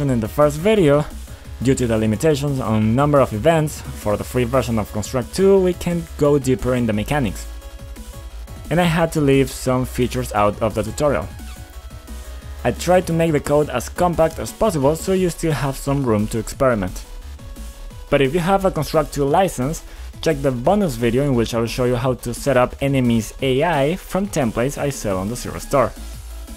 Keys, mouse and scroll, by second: 0.0-0.9 typing, 2.7-6.3 typing, 7.7-8.4 typing, 10.6-12.9 typing, 14.0 d, 15.6 j, 17.1-19.7 typing, 23.7 click, 24.6-26.5 typing.